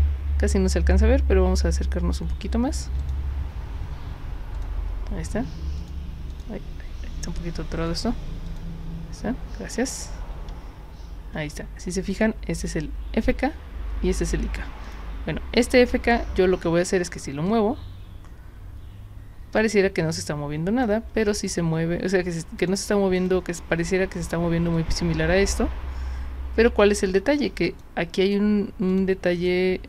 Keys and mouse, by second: 3.0 click, 4.5 click, 5.8 click, 6.3 click, 7.9 click, 8.5 click, 14.9 click, 16.7 w, 17.5-20.8 drag, 21.4 click, 22.6 click, 23.2 click, 24.2 click, 24.8-27.8 drag, 28.2 click, 28.9 click, 29.3 click.